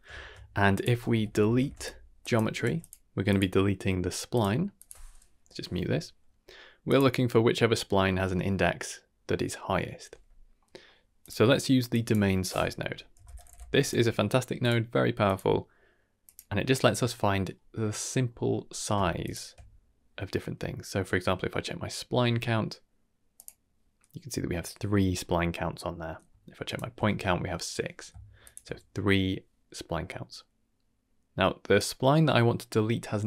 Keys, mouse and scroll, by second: 0.0 scroll down 1, 0.0 shift+a, 0.0 shift+a, 1.6 e, 2.6 g, 3.2-4.3 drag, 4.7 click, 5.3 m, 6.8 click, 10.5 middle click, 11.0 shift+a, 11.1 drag, 11.9-14.6 drag, 15.2-16.3 drag, 18.2 middle click, 19.2 ctrl+shift+click, 21.2-22.1 middle drag, 23.3 click, 25.1-26.0 middle drag, 26.6 ctrl+shift+click, 28.4 ctrl+shift+click, 31.7 click.